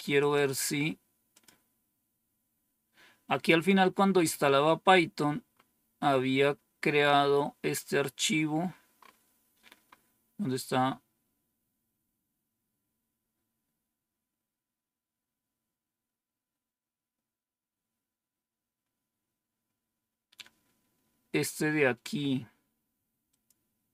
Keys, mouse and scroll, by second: 0.1 click, 1.2 click, 3.3-4.1 scroll down 5, 4.8 scroll down 2, 5.4 scroll down 2, 7.8 scroll down 2, 8.3-9.3 scroll down 2, 11.8-12.5 scroll down 2, 13.2 scroll down 2, 23.2 click.